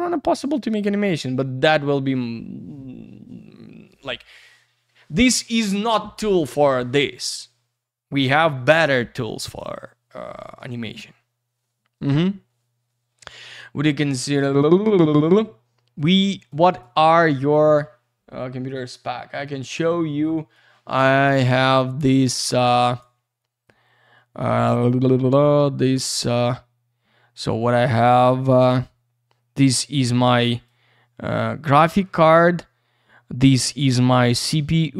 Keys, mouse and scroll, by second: 14.5 scroll down 1, 16.7 click, 16.8 click, 19.3 click, 19.4 click.